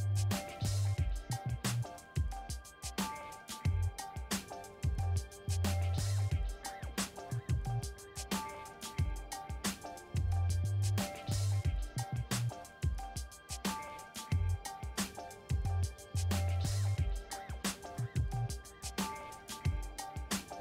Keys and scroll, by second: 19.7 ctrl+shift+Left.